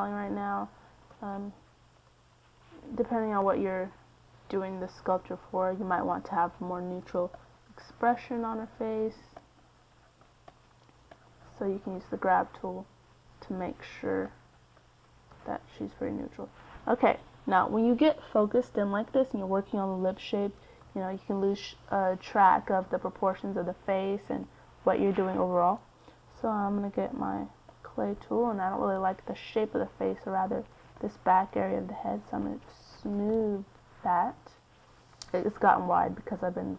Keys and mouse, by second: 5.2-7.2 middle drag, 9.5 middle click, 9.8-16.5 drag, 16.5 middle click, 19.3 middle click, 20.8 KP_1, 23.1-25.9 middle drag, 28.6 c, 29.6 f, 32.5-36.1 drag, 36.3-36.7 middle drag.